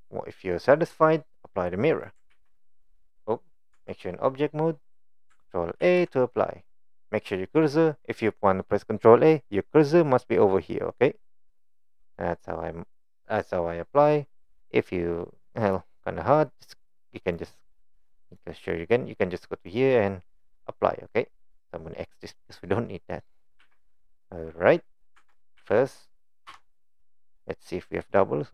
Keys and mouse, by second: 1.9 click, 2.3 ctrl+a, 3.7 Tab, 5.0 click, 5.8 ctrl+a, 15.6 click, 17.3-18.4 drag, 19.7-21.3 drag, 22.2 click, 23.6 a, 23.9 middle click, 25.2 Tab, 25.6 a, 26.5 m, 28.1 middle click.